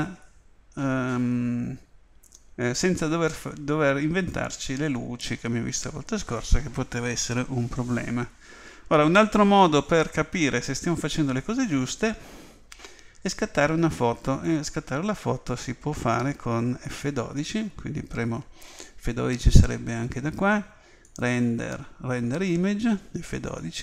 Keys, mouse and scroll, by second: 10.1-12.0 middle drag, 21.0 click.